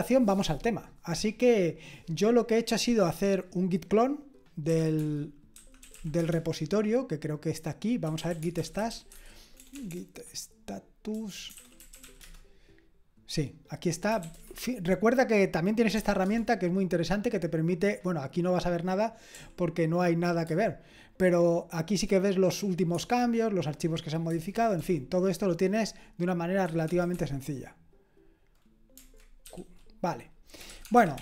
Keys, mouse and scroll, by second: 2.3-4.7 drag, 4.5-6.4 typing, 7.8-9.9 typing, 11.3-12.5 typing, 13.8-16.4 typing, 20.4 Tab, 20.4 typing, 22.9 Tab, 24.3 Tab, 24.8 Escape, 26.6 Escape, 26.8 Escape, 27.1 Escape, 29.5-31.2 typing.